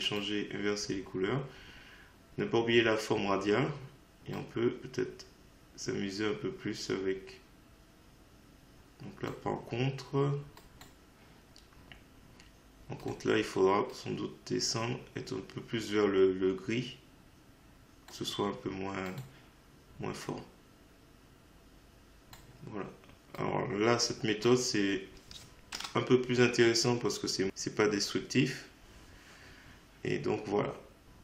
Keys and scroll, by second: 25.8 Return.